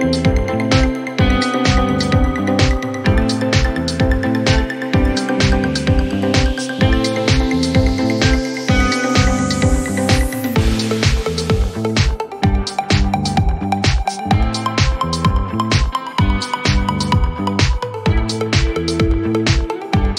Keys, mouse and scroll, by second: 0.7 click, 12.1 click, 16.6 click.